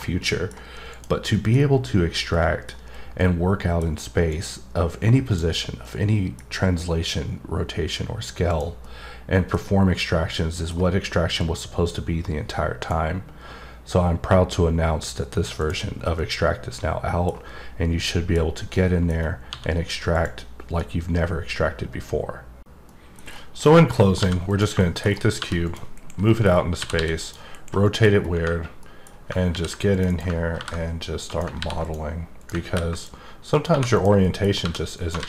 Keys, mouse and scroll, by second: 0.2 middle click, 0.9 click, 1.3 middle click, 2.3 middle click, 3.3 middle click, 4.3 click, 5.8 middle click, 8.5 click, 8.8 middle click, 9.6-10.1 scroll up 2, 10.1 scroll down 1, 10.3 middle click, 11.4 click, 15.6 click, 15.9 scroll down 1, 16.2-17.4 middle drag, 18.0 middle click, 18.7 middle click, 19.1 scroll up 1, 20.1 click, 23.2-24.4 scroll down 10, 24.4 click, 24.7 middle click, 25.0 scroll down 3, 25.6 click, 26.2 middle click, 26.4-27.2 scroll down 3, 27.2 click, 27.8 middle click, 28.1 scroll up 2, 28.8 middle click, 29.9 click, 30.0 right click, 31.2 click, 31.8 click, 32.3 click, 32.9 click, 33.5 click, 33.9 click, 34.2 middle click, 34.9 click.